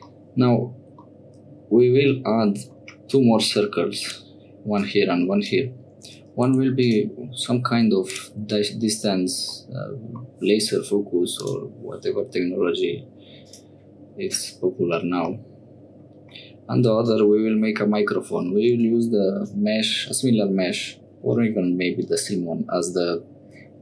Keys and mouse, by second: 0.1 shift+click, 1.0-2.7 middle drag, 3.1-4.1 middle drag, 4.7 middle click, 6.5 1, 6.8 click, 7.8 2, 8.1 click, 9.5 click, 11.4 click, 13.5 click, 15.4 click, 17.0-19.4 drag.